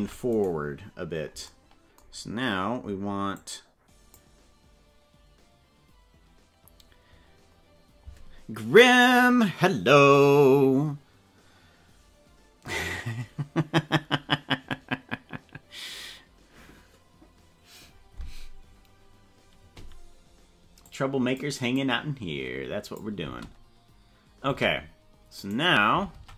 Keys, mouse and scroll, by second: 0.4 right click, 3.3 click, 20.8 click, 21.7-23.1 drag, 23.1 space, 24.5 space, 25.3 right click, 26.1 ctrl+Tab.